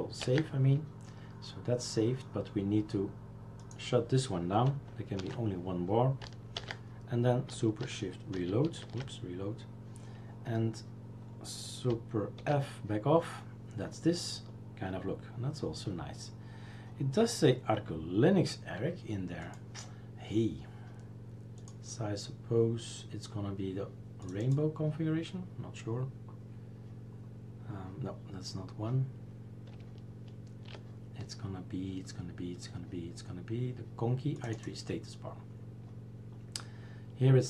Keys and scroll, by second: 0.2 ctrl+s, 5.2 shift+3, 6.6 ctrl+s, 8.3 shift+super+t, 12.5 super+f.